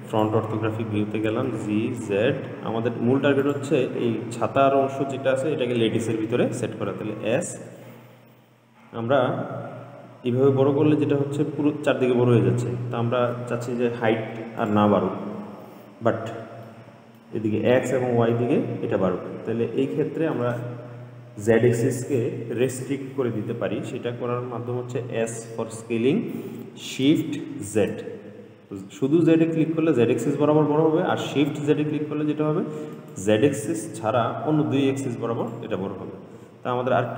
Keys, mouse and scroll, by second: 0.3 click, 1.7 g, 7.1 s, 16.9-21.7 middle drag, 25.9 s, 35.7 click.